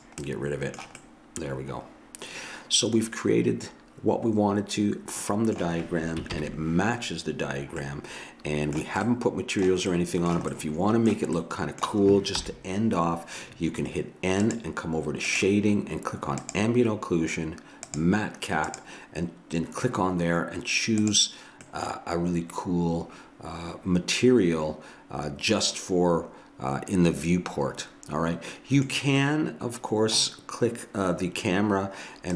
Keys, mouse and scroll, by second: 6.4 ctrl+KP_1, 7.9 middle click, 12.4 n, 14.5-20.5 drag, 21.7-23.4 middle drag, 29.2-32.1 middle drag, 32.3 click.